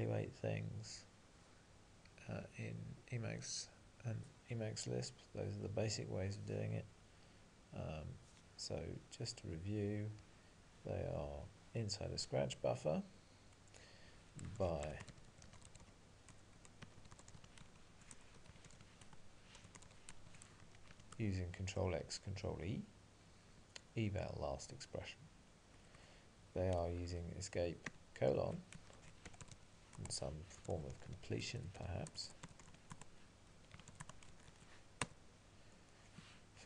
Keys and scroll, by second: 19.1 Tab, 20.9 ctrl+e, 27.9 alt+:, 30.0 Tab, 35.1 Return.